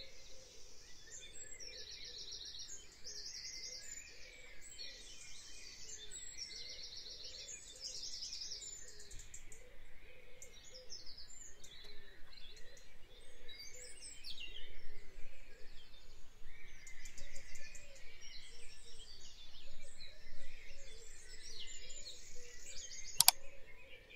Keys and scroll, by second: 6.9 F5.